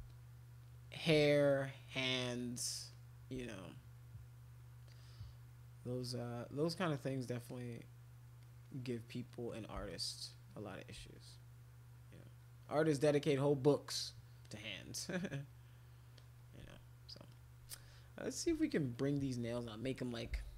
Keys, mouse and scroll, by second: 0.0 shift+click, 1.1 shift+click, 1.3 shift+click, 1.5 shift+click, 1.7 shift+click, 1.9 shift+click, 2.2 shift+click, 2.3 shift+click, 2.5 shift+click, 2.9 shift+click, 3.7 click, 3.9 click, 4.6 click, 5.0 click, 5.2 click, 6.6 click, 7.5 click, 8.4 click, 8.6 click, 8.8 click, 9.0 click, 9.2 click, 9.4 click, 9.7 click, 9.9 shift+click, 10.0 shift+click, 10.3 shift+click, 10.5 shift+click, 11.1 click, 12.4 click, 13.4 click, 14.4-15.4 drag, 16.1 click, 17.3 alt+click, 17.7 click, 18.6 alt+click, 20.5 ].